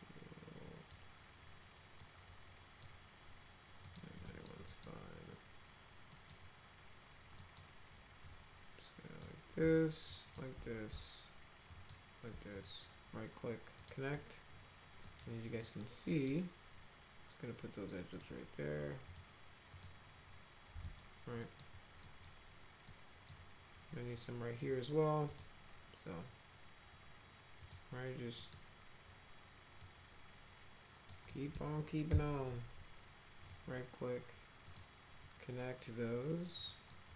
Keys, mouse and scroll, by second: 2.0 click, 3.9 click, 4.3 middle click, 4.7 middle click, 6.1 middle click, 7.4 middle click, 8.2-9.3 drag, 10.1 ctrl+click, 11.7 ctrl+click, 12.5 right click, 13.8 click, 15.1 middle click, 15.6 middle click, 16.1 middle click, 18.2 click, 19.1 click, 19.8 click, 20.9 middle click, 21.4 middle click, 22.1 middle click, 22.9 middle click, 25.3 click, 27.6 click, 28.4 middle click, 29.8-31.1 drag, 31.3 middle drag, 32.1 F3, 33.4 right click, 34.7 click, 36.6 click, 36.9 middle click.